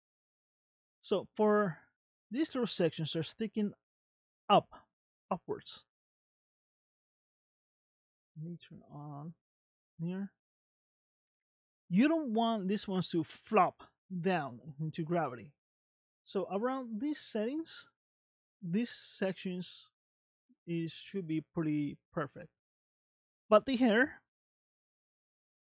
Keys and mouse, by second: 0.4 shift+middle click, 5.9 shift+middle click, 9.1 click, 10.0-11.1 middle drag, 21.9 shift+middle click, 23.1 middle click, 24.6 space.